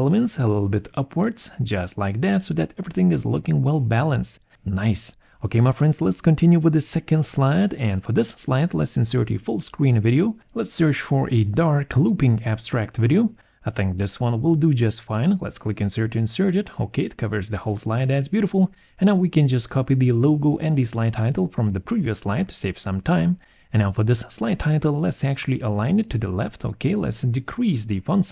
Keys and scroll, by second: 6.4 Return, 7.8 alt+2, 11.1 d, 19.1 ctrl+c, 19.8 ctrl+v, 27.2 5, 27.3 4, 27.4 Return.